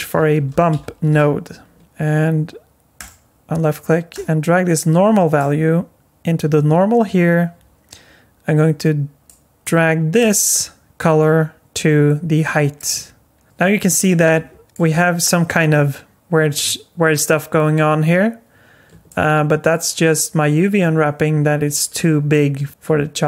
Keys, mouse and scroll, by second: 4.1 click, 9.3 click, 10.2 click, 13.4 middle click, 14.2 scroll up 4, 14.6 alt+middle click, 19.1 middle click.